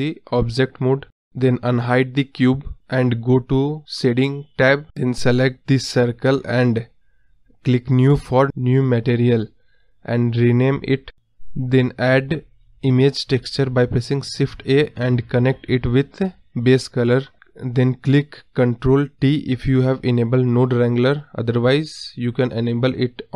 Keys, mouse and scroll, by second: 0.0 scroll down 2, 0.2 scroll up 3, 0.4-3.2 middle drag, 3.2 click, 3.6-4.0 scroll down 1, 4.0 KP_Decimal, 4.3 scroll up 2, 4.6-4.9 middle drag, 4.9 scroll down 2, 5.0-8.1 middle drag, 8.1 click, 8.3 scroll up 1, 8.9 KP_1, 9.2-9.7 scroll down 1, 9.7-11.4 drag, 18.0 click, 18.2-19.0 scroll down 1, 19.0 click, 19.9 ctrl+t.